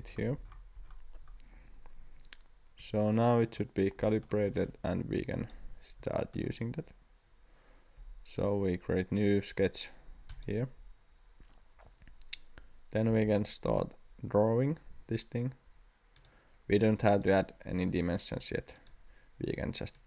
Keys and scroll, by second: 13.1 c.